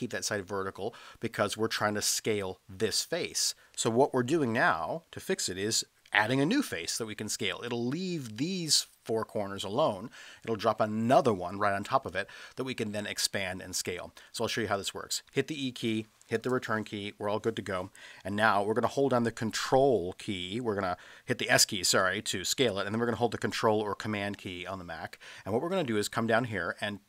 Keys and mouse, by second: 4.4 ctrl+z, 14.2 middle click, 15.3 e, 16.4 Return, 21.9 s.